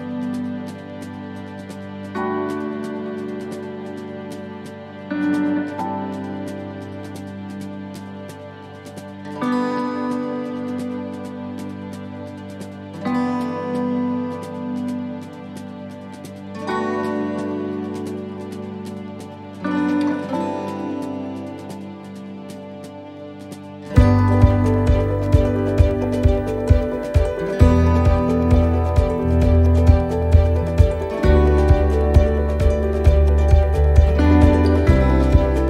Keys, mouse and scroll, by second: 30.1-35.6 click.